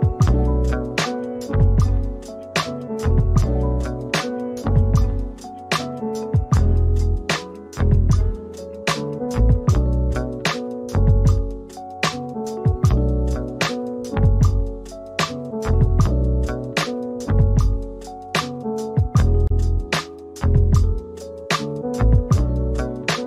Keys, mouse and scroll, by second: 0.3 alt+middle click, 2.0 double click, 4.2 alt+click, 7.0 alt+middle click, 8.9 c, 9.7 alt+middle click, 11.4 alt+click, 12.5 ctrl+d, 14.6 alt+click, 16.3 alt+click, 17.3 alt+scroll up 1, 17.6 middle click, 19.3-20.2 scroll up 1, 20.7 ctrl+click.